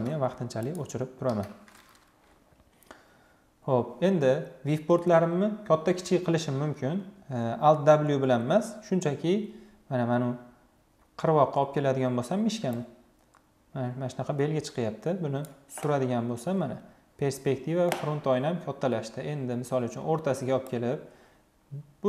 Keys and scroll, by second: 0.9 Delete.